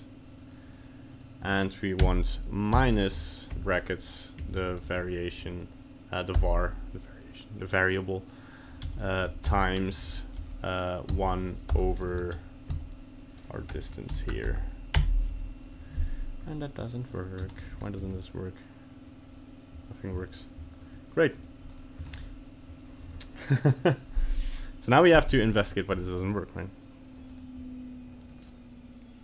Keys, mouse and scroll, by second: 17.1 right click, 17.5 ctrl+Tab, 17.7 right click, 18.0 g, 21.4 right click, 21.7 right click, 22.1 ctrl+Tab, 22.2 right click, 25.6 right click, 25.9 right click, 26.3 right click, 27.3 right click, 28.2 right click.